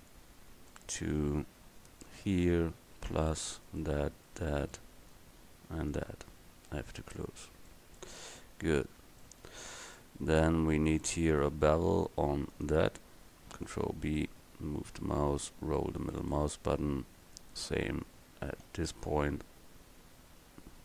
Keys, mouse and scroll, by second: 7.2 f, 13.8 ctrl+b, 14.5-15.2 scroll up 1, 18.7 ctrl+b.